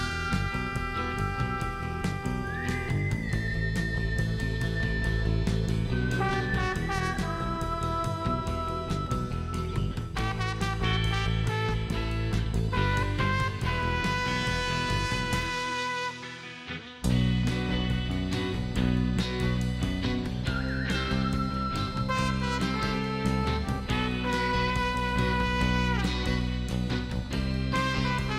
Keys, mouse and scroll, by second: 0.3 click, 0.8 middle click, 1.0 scroll up 2, 2.4 click, 3.4 click, 3.8 right click, 5.2 click, 6.1 click, 8.3 click, 8.6 right click, 9.1 scroll up 1, 10.0 click, 12.3 click, 13.6 click, 15.0 click, 16.3 click, 17.5 click, 19.0 click, 20.4-21.3 typing, 22.3 click, 23.8 click, 25.3 middle click.